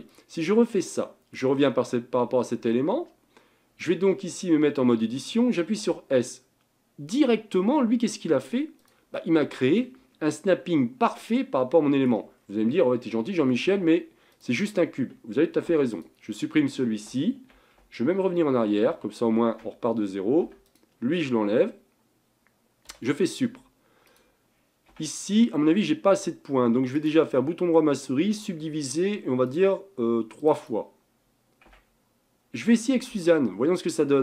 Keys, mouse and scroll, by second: 0.1 click, 0.5-3.5 middle drag, 4.9 Tab, 5.9 s, 9.2 middle click, 10.0-10.5 scroll up 4, 10.5-12.2 middle drag, 12.2 scroll up 1, 12.5 scroll down 4, 13.5 Tab, 13.9 scroll down 1, 14.3 click, 15.7 x, 18.3 ctrl+z, 18.5 ctrl+z, 18.9 ctrl+z, 19.3 ctrl+z, 20.5 Tab, 20.7 click, 23.0 Delete, 24.1 click, 25.0 Tab, 26.9-29.6 right drag, 29.6-31.7 drag, 31.7 Tab, 33.0 shift+a.